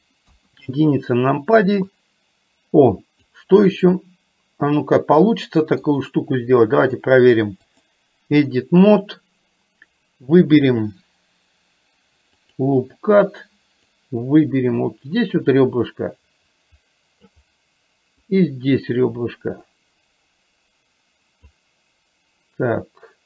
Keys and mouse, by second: 0.4 KP_1, 2.0-3.4 drag, 3.9-5.9 middle drag, 6.9-8.0 drag, 8.5 middle click, 12.5 click, 14.0-17.4 drag, 18.4-21.6 drag.